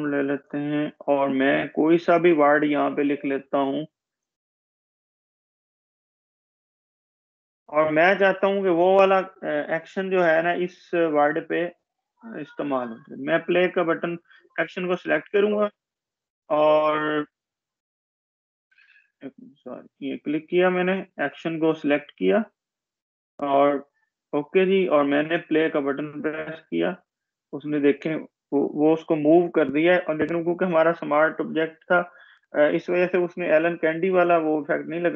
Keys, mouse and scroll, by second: 6.3 Caps_Lock, 6.5-7.2 typing, 8.6 click, 15.5-16.7 scroll down 1, 16.7 click, 17.8-19.7 scroll up 1, 20.6 click, 20.8-22.7 scroll down 1, 22.7 click, 24.7-25.6 scroll down 1, 25.6 click, 32.6-35.1 drag.